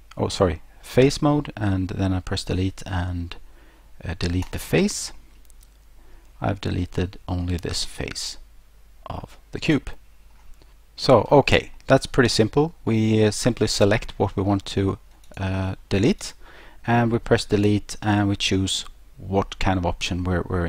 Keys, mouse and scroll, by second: 4.4 click, 5.2 middle click, 5.2-5.8 scroll, 11.8 middle click, 15.3 click, 16.2 right click.